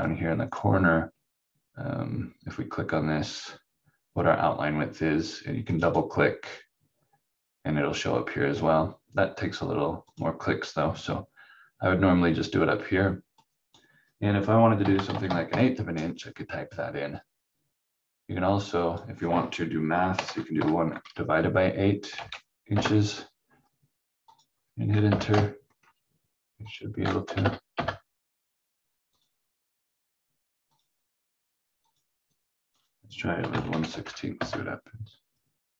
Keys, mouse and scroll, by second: 0.5 click, 10.1 click, 13.4 click, 14.6-15.7 typing, 18.6 click, 20.1 1, 20.6 8, 22.0 i, 22.7 Return, 24.3 click, 25.1 Return, 25.8-26.7 scroll up 1, 26.7 click, 27.2 BackSpace, 27.4 BackSpace, 27.7 Return, 29.2 click, 33.4 1, 33.9 6, 34.4 Return.